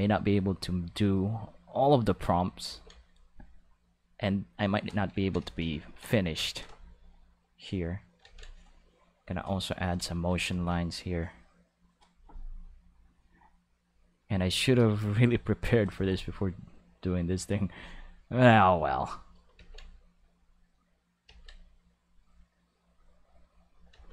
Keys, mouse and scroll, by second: 0.1 click, 1.7 click, 2.7 ctrl+z, 3.1 click, 3.9 click, 5.2 ctrl+middle click, 5.6 shift+middle click, 5.8 ctrl+middle click, 7.6 click, 8.3 ctrl+z, 8.5 click, 9.3 click, 10.3 ctrl+z, 10.5 ctrl+z, 11.2 click, 11.8 click, 13.1 click, 13.9 click, 16.6-17.4 drag, 18.6 click, 19.6 ctrl+z, 20.1 click, 21.3 ctrl+z, 21.7 click, 22.9 click, 23.9 ctrl+z.